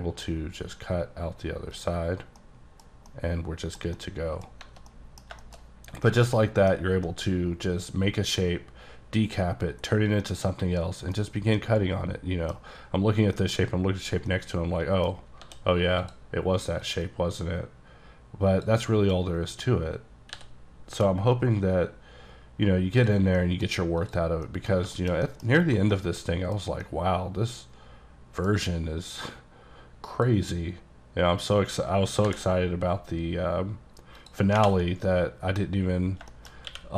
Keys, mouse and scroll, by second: 0.0 scroll down 1, 2.2 scroll down 1, 2.4 middle click, 2.9 scroll down 1, 3.1 middle click, 4.0 double middle click, 5.1 middle click, 5.3 scroll down 2, 5.5 shift+middle click, 6.0 scroll up 1, 6.1 middle click, 6.7-7.1 scroll down 3, 7.1 middle click, 8.5-10.0 scroll down 1, 10.3 middle click, 11.3-11.6 scroll up 2, 11.6 middle click, 13.4 middle click, 14.1 scroll down 1, 14.4 middle click, 15.5 d, 16.1 click, 16.9 click, 20.4 b, 21.2-23.0 scroll down 10, 23.0 click, 23.4 middle click, 24.1 click, 24.5 middle click, 24.9 shift+middle click, 25.0 shift+scroll up 1, 25.0 shift+middle click, 25.6 scroll up 3, 26.0 middle click, 26.9 middle click, 29.2 click, 32.3 b, 34.2 click, 34.9 scroll down 2, 35.1 middle click, 36.4 middle click, 36.6 scroll down 1, 36.7 q.